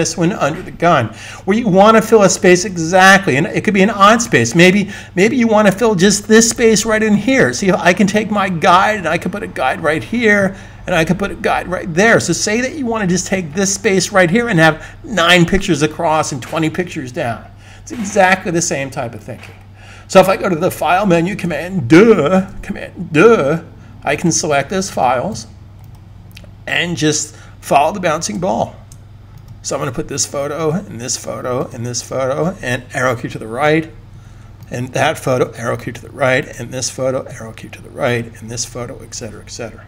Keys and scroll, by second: 22.3 super+d, 33.5 Right, 34.0 Right, 35.3 Right, 35.8 Right, 37.2 Right.